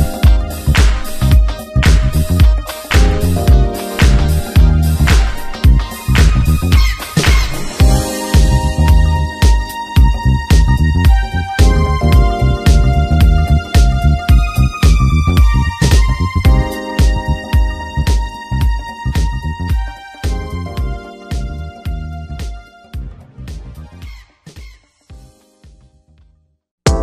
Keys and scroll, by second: 3.8 space, 8.4 space, 10.2 w, 11.4 Return, 12.2 shift+F2, 12.6 ctrl+d, 13.0 ctrl+KP_Subtract, 13.6 ctrl+w, 14.0 Return, 15.2 alt+space, 15.5 c, 16.6 ctrl+KP_Add, 17.5 alt+i, 17.7 alt+a, 18.0 ctrl+space, 18.5 shift+F2, 18.8 ctrl+space, 19.2 b, 20.7 Return, 22.4 w, 24.9 Return, 25.6 shift+F2, 26.1 ctrl+space.